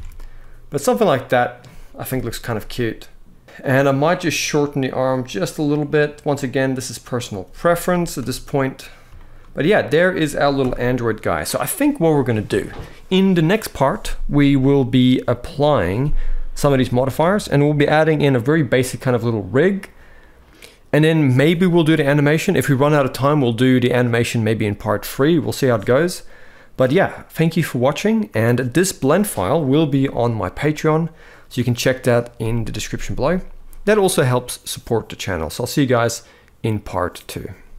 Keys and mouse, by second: 1.8 KP_1, 4.7 drag, 5.7 click, 7.4 click, 7.6 g, 7.9 x, 9.0 click, 9.1 shift+middle click, 10.3 KP_1.